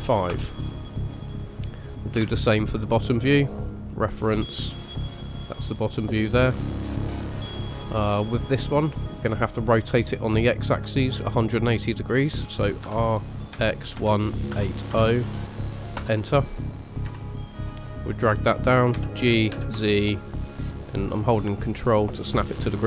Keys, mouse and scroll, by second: 1.6 middle click, 2.3 shift+a, 7.5 middle click, 12.8 r, 17.0 KP_3, 18.9 g.